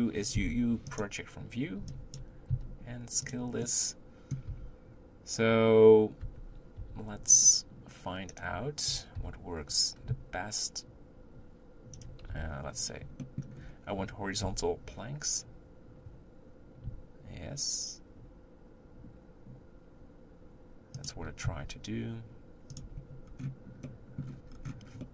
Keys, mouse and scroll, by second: 1.0 u, 2.2 b, 3.7 middle click, 4.5 Tab, 6.3 Tab, 6.8 r, 9.2 r, 12.4 r, 13.2 middle click, 13.5-14.5 scroll up 2, 14.5 r, 21.5 s, 23.0 Tab, 23.3-24.0 scroll down 1, 24.0 middle click, 24.5-25.0 scroll down 1, 25.0-25.1 middle drag.